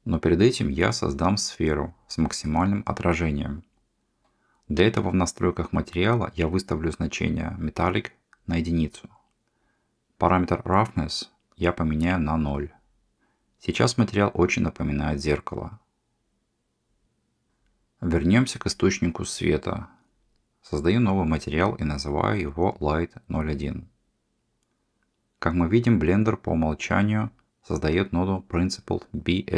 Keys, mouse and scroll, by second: 4.4 middle click, 5.6-7.1 drag, 8.7-10.4 drag, 17.5 click, 19.6 middle click, 25.0 middle click.